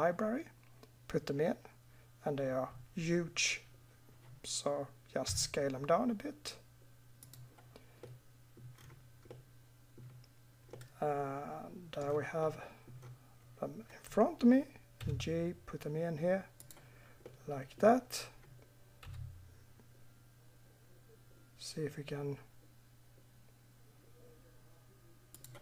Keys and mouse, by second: 0.0 click, 0.1 click, 5.2 s, 10.8 middle drag, 11.3 middle click, 11.5 middle click, 15.0 g, 19.0 g.